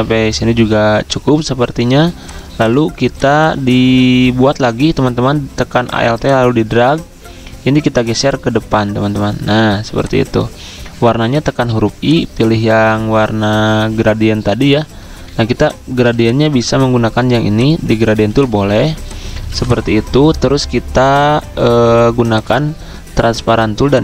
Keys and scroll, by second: 11.4 i, 14.8 ctrl+z, 16.1 z, 18.1 z, 19.2-19.9 typing.